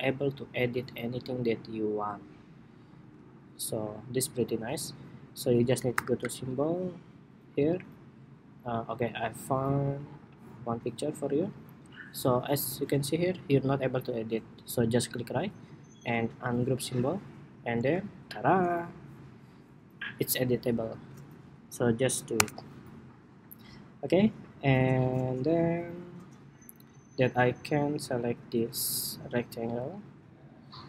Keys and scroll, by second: 2.7 super+z, 5.6 shift+super+y.